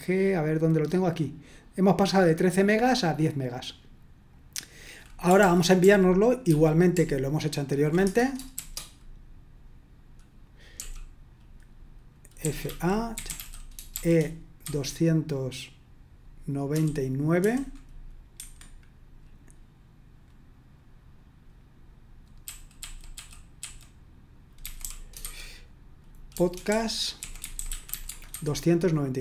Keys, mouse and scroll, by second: 1.8-3.6 drag, 4.3 click, 5.4 ctrl+p, 5.8 ctrl+p, 6.5 ctrl+p, 6.9 ctrl+p, 8.6 Return, 10.7 l, 12.2-14.6 typing, 16.7-17.4 typing, 18.4 Escape, 22.4-25.2 typing, 26.3-28.3 typing.